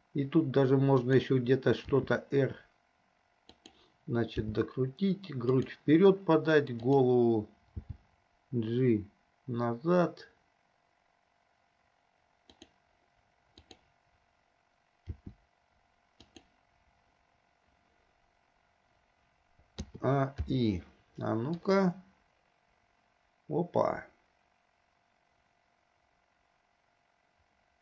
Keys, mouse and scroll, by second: 0.0 g, 2.1 r, 4.7 g, 7.0 click, 8.1 g, 13.8 click, 15.3 r, 19.9 a, 20.7 i, 21.9-27.8 drag.